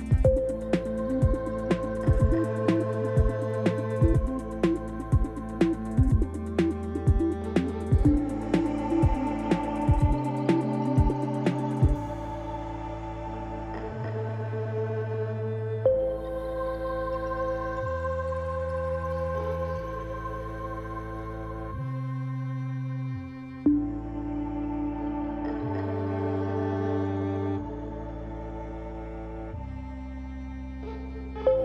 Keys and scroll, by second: 0.0 shift+z, 0.9 1, 2.3 x, 5.2 r, 11.1 ctrl+z, 12.1 f, 14.6 j, 15.0 shift+z, 16.4 3, 19.3 u, 23.4 g, 31.3 1.